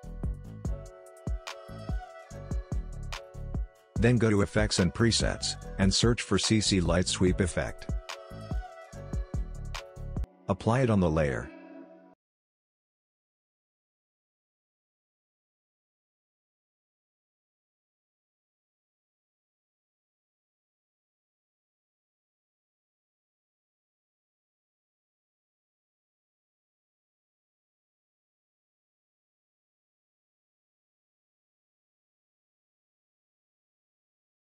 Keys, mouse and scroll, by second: 0.0-0.9 typing, 1.0 Return, 2.0 click, 5.0 click, 6.2-8.7 typing, 9.5-17.4 drag, 17.8 click, 21.7 click, 23.2 Return, 26.0 click, 27.9 Return, 29.1 click, 30.5 Return, 31.6 click, 32.8 Return, 34.3-34.4 drag.